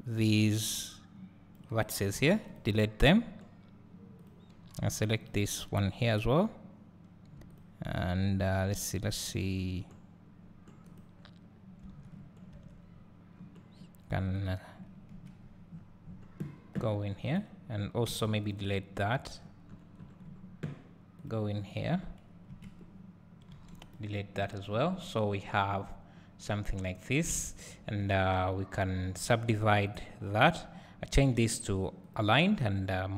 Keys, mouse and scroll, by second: 2.6 x, 4.2 click, 5.3 x, 6.3 click, 7.5 shift+click, 8.5-11.0 scroll up 1, 11.0-12.0 drag, 12.4 scroll down 2, 12.7 Tab, 12.8 scroll up 1, 13.3 scroll down 1, 14.3 click, 15.1 KP_Decimal, 15.7-17.3 scroll up 2, 17.3-18.5 drag, 18.5 x, 19.4-20.3 scroll down 2, 21.2 click, 21.7 click, 22.5 KP_Decimal, 23.9 x, 24.3-24.7 scroll down 1, 25.9-26.8 scroll up 1, 26.8 click, 27.6 shift+click, 30.4 click.